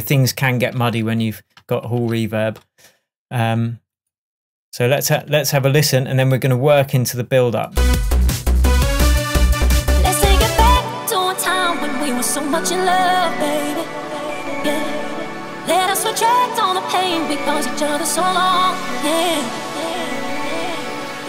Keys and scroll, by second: 5.1 space.